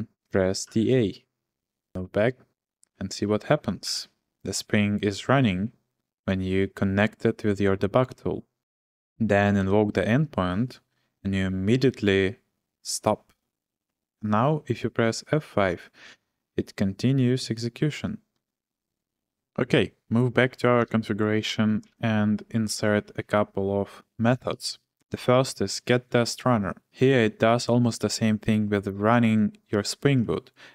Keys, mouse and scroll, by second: 0.4-1.3 typing, 1.9 ctrl+l, 3.8 shift+g, 8.6 click, 9.6 Return, 18.3 F5, 20.4 o, 20.8 Return, 21.8 ctrl+shift+v, 26.5-27.2 typing, 30.2-30.7 k.